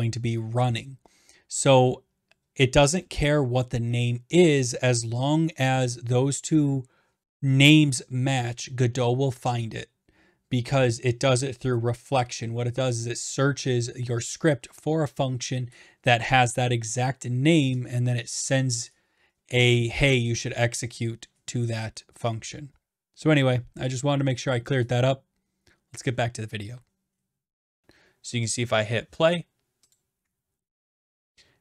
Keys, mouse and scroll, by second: 27.8-29.7 drag, 29.9-31.1 drag.